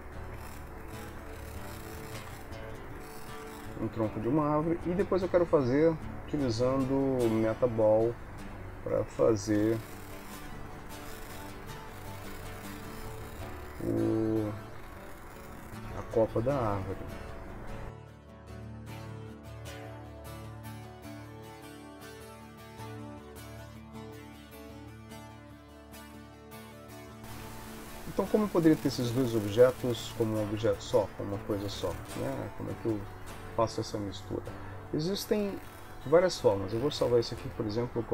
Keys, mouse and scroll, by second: 0.5 Tab, 0.9 click, 1.3 alt+s, 2.3 Tab, 3.1 shift+middle click, 5.2 shift+a, 9.7 g, 11.0 s, 11.9 shift+d, 14.9 shift+d, 16.7 shift+g, 18.2-22.1 typing, 19.6 click, 20.1 middle click, 20.2 middle click, 20.5 click, 21.0 middle click, 21.9 middle click, 22.3 shift+middle click, 23.9-26.4 typing, 25.0 middle click, 25.6 click, 26.2 middle click, 26.8 shift+middle click, 27.2 shift+middle click, 28.6 ctrl+middle click.